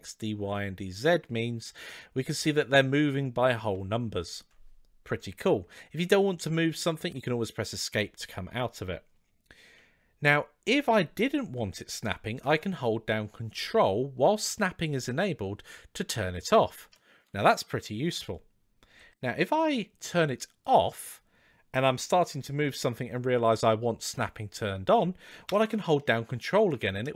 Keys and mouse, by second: 10.5 g, 20.4 click, 21.8 g.